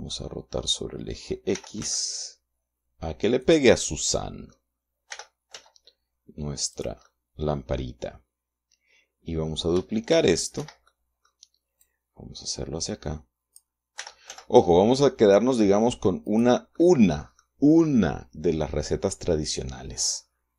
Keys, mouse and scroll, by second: 1.9 r, 2.1 x, 3.7 click, 4.1 middle click, 5.4 r, 5.9 z, 7.1 click, 10.5 shift+d, 10.9 shift+Escape, 11.2 shift+middle click, 12.1-14.1 drag, 14.3 r, 14.6 z, 16.6 click, 17.1 middle click.